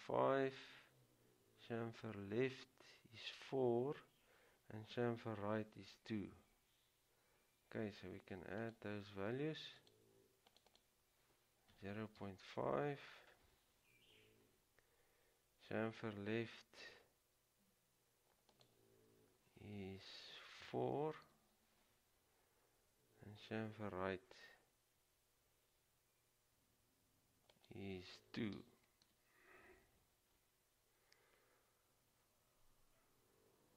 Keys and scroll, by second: 11.7-12.9 typing, 20.7 typing, 28.7 typing.